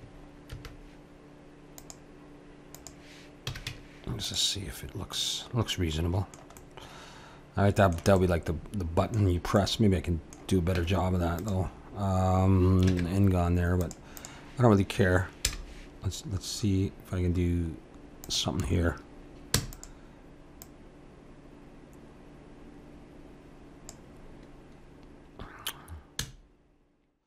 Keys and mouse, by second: 0.5 ctrl+r, 3.5 a, 3.7 Tab, 4.7-11.5 middle drag, 10.8 Tab, 12.9 ctrl+Tab, 15.4 i, 19.5 e, 20.6-22.5 drag, 26.2 r.